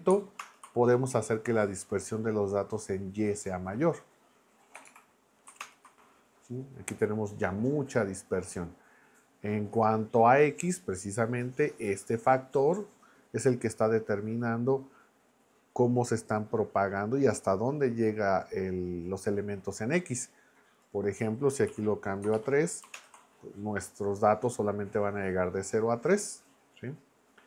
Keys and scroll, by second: 0.4 ctrl+Return, 4.7 BackSpace, 4.9 4, 5.6 ctrl+Return, 21.7 Right, 22.2 BackSpace, 22.3 3, 22.9 ctrl+Return.